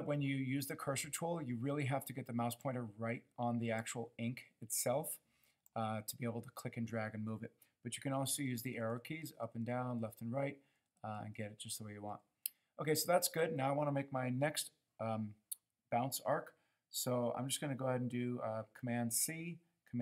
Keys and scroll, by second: 8.4 Up, 8.6 Up, 8.7 Up, 8.9 Up, 9.2 Down, 9.4 Down, 9.6 Down, 9.8 Down, 10.0 Down, 10.8 Up, 11.0 Up, 11.2 Up, 11.6 Up, 18.8 super+c.